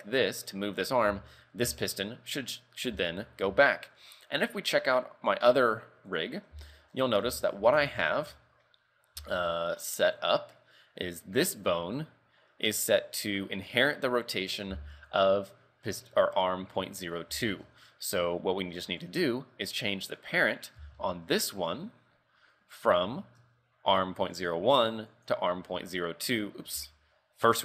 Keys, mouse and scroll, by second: 1.2 z, 1.7 z, 3.1 shift+middle click, 3.8 shift+middle click, 5.4 click, 6.2 right click, 6.9 shift+middle click, 7.3 ctrl+Tab, 7.7 z, 7.9 shift+middle click, 8.4 a, 8.7 scroll down 2, 9.3 shift+middle click, 9.6 scroll up 2, 10.3 right click, 11.6 click, 13.4 scroll up 1, 14.8 z, 15.2 right click, 17.5 shift+middle click, 19.1 click, 20.2 right click, 20.5 right click, 20.9 z, 21.1 shift+middle click, 22.5 scroll up 4, 23.5 Tab, 24.4 click, 26.8 ctrl+z.